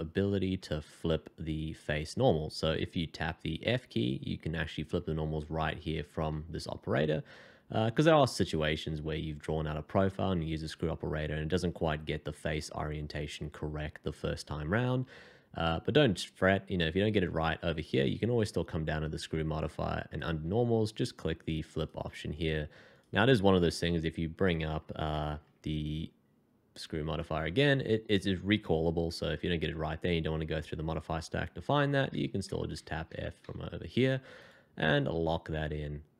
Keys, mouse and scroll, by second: 0.6 scroll up 1, 3.8 f, 6.3 f, 6.6 f, 18.4-21.5 scroll down 1, 21.8 double click, 23.6 f, 25.2 shift+2, 32.2-33.4 typing, 35.0 middle click.